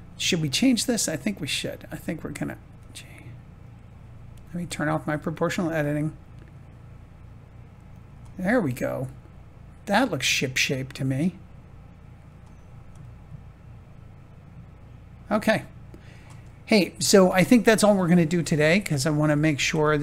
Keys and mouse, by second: 0.2 click, 0.5 Tab, 1.5 click, 2.6 g, 5.0 click, 5.6 g, 7.8 click, 8.3-10.0 middle drag, 12.9-15.9 drag, 16.5 shift+click, 19.2 Tab.